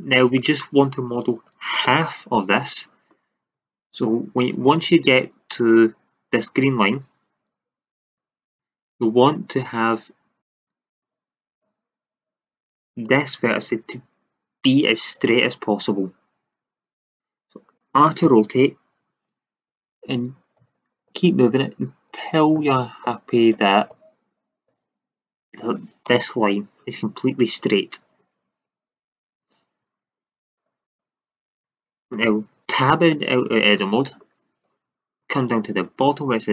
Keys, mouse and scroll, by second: 3.5 e, 6.3 r, 8.0 click, 8.4 e, 8.5 drag, 10.9 r, 13.6 e, 14.7 click, 17.0-19.5 drag, 18.2 r, 28.4-28.9 middle drag, 28.9-30.4 middle drag, 31.1 middle click, 32.8 Tab.